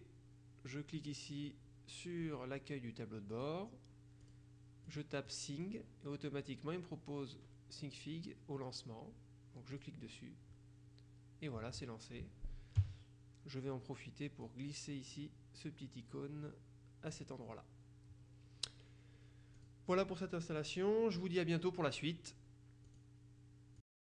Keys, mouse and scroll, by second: 3.4 click, 4.3 click, 9.7 click, 14.5-17.6 drag, 19.6 click, 22.9 click, 23.9 click.